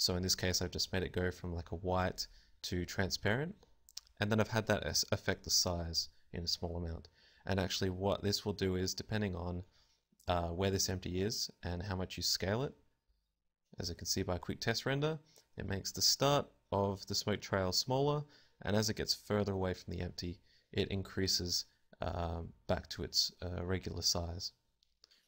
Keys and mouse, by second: 12.9 s, 13.9 click, 14.3 KP_0, 20.4 Escape.